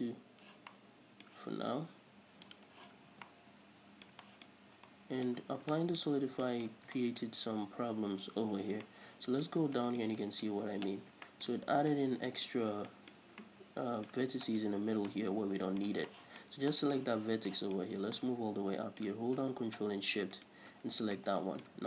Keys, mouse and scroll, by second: 0.2 click, 1.1-2.9 middle drag, 2.9 click, 3.4 scroll down 1, 3.6 Tab, 3.7-14.9 middle drag, 4.9 scroll up 1, 5.8 scroll down 1, 7.2 scroll down 1, 7.7 scroll up 1, 9.9 scroll up 1, 11.0 Tab, 11.4 scroll up 1, 13.0 scroll up 2, 14.9 right click, 15.5-20.9 middle drag, 18.3-18.6 scroll up 2, 20.9-21.4 ctrl+shift+right drag, 21.4 scroll down 2, 21.6 middle click.